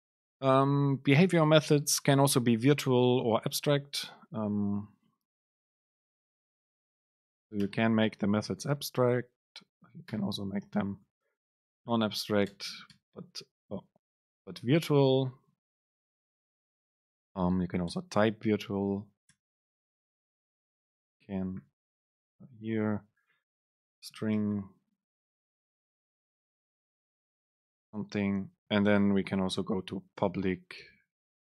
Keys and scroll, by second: 12.1 Left, 12.5 BackSpace, 14.4 super+z, 14.9 super+z, 17.6 Left, 17.9 BackSpace, 18.8 Escape, 19.1 Right, 19.4 BackSpace, 20.9 BackSpace, 21.0 super+space, 22.1 Return, 24.9 BackSpace, 28.9 super+Left, 29.9 super+Right, 31.3 BackSpace.